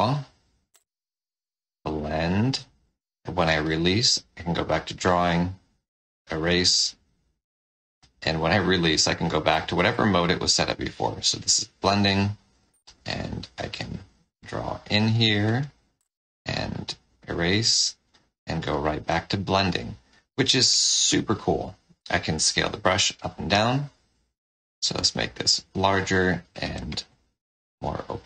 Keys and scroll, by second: 5.1 5, 9.4 4, 15.5 1, 15.9 5.